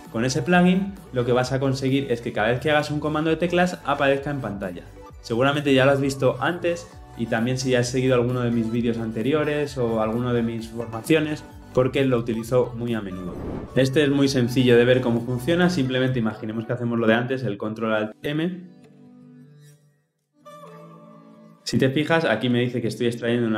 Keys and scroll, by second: 19.7 ctrl+alt+shift+m.